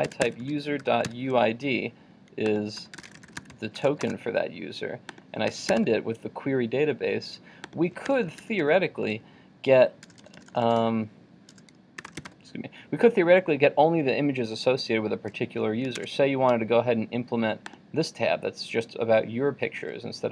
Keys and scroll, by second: 16.0 super+Tab.